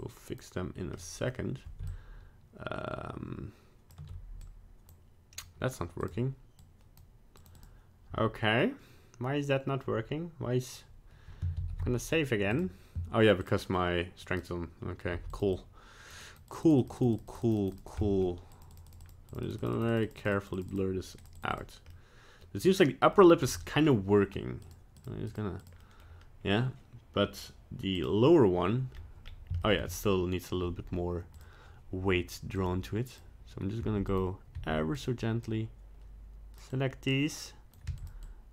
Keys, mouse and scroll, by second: 0.0 click, 0.9 middle click, 1.8 shift+click, 4.5 click, 6.0 click, 6.6 click, 7.4 click, 7.6 click, 12.0 ctrl+s, 12.5 click, 13.4 click, 14.2 click, 15.1 f, 15.5 click, 16.2 click, 16.5 click, 16.7 click, 16.8 click, 17.0 click, 17.1 click, 17.3 click, 17.5 click, 17.6 click, 17.8 click, 18.0 middle click, 18.5 click, 18.7 click, 18.9 click, 19.0 click, 19.3 click, 19.5 click, 19.6 click, 19.7 click, 19.9 click, 20.1 click, 20.2 click, 20.3 click, 20.6 click, 20.7 click, 21.2 click, 21.4 click, 21.5 click, 21.9 middle click, 22.6 middle click, 23.2 middle click, 23.8 middle click, 24.6 click, 25.0 click, 25.3 click, 25.6 click, 25.8 middle click, 28.0 click, 28.9-29.4 scroll up 2, 29.6 shift+middle click, 29.8 scroll down 1, 31.3 click, 32.5 click, 33.8 f, 34.5 f, 35.5 click, 36.7 click, 37.8 f, 38.2 click.